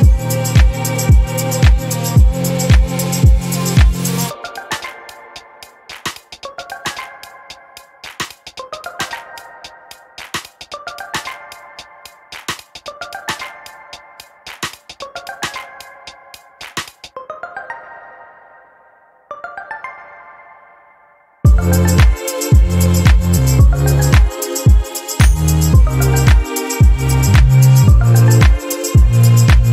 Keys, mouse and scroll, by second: 0.4 click, 1.4-3.6 ctrl+drag, 4.2-4.7 ctrl+scroll up 4, 6.0 click, 6.4 space, 7.7-8.1 ctrl+scroll up 4, 10.0 click, 11.3 ctrl+y, 12.1 ctrl+shift+click, 14.2 click, 15.2 click, 16.1-17.1 typing, 18.8 click, 19.9 ctrl+d, 20.2-21.7 ctrl+drag, 21.9 click, 23.9 click, 25.1-27.2 drag, 27.7 click, 28.8 click.